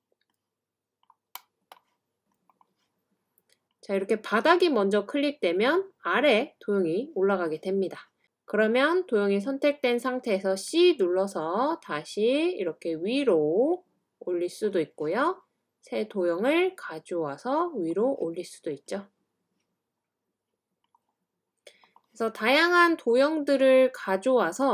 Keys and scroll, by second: 10.6-11.5 typing.